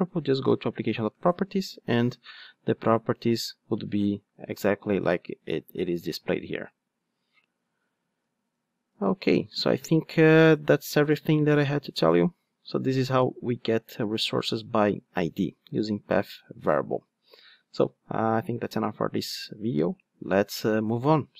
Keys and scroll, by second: 7.4 super+z, 8.3 super+z.